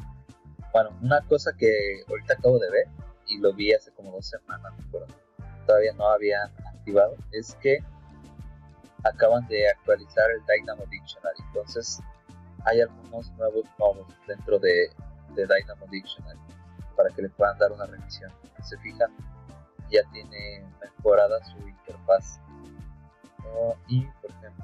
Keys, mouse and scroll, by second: 4.9-7.0 scroll down 2, 7.0 click, 16.2 click.